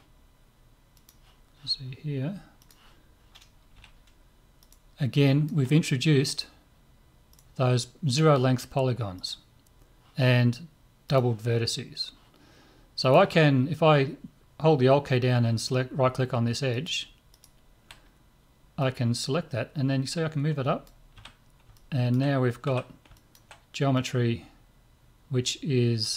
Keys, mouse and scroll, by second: 3.8 z, 4.6 right click, 5.2-6.9 drag, 5.3-7.2 middle drag, 7.2-10.9 right drag, 11.1-16.4 drag, 16.7 right click, 18.8-20.7 drag, 21.1 z, 21.7 middle click, 22.6 z, 23.9-26.1 drag, 23.9 middle click.